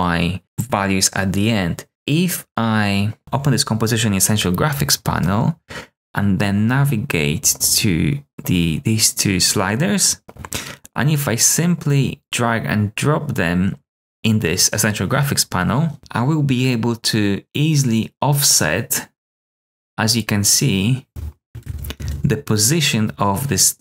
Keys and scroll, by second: 21.9 super+z.